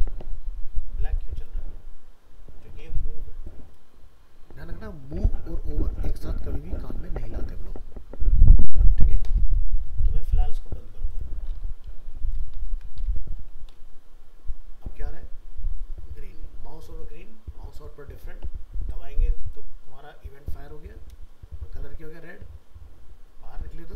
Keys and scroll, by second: 12.7 ctrl+s, 13.1 alt+Tab.